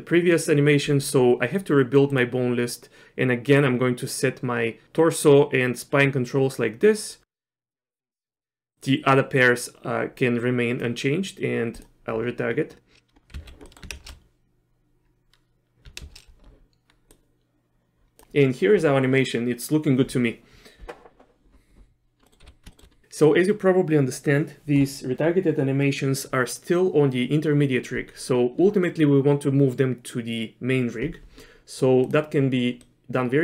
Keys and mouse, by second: 2.1 click, 3.5 click, 7.1-8.4 drag, 8.9-10.9 drag, 11.8-12.9 drag, 13.3 z, 13.6 middle click, 13.9 shift+space, 16.1 shift+space, 17.1-18.2 drag, 22.2 middle click, 22.4 z, 22.7 shift+middle click, 32.0 click, 32.9 middle click.